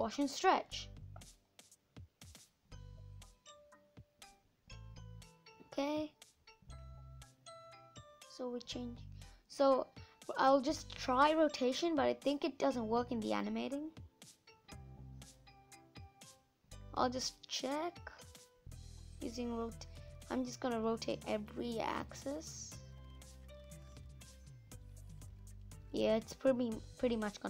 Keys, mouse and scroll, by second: 1.3 space, 1.5 middle click, 2.5-3.0 scroll up 6, 3.0 middle click, 3.4 space, 3.8 scroll down 3, 4.6-6.2 drag, 7.5-15.2 drag, 16.5-21.3 drag, 23.2-27.4 drag.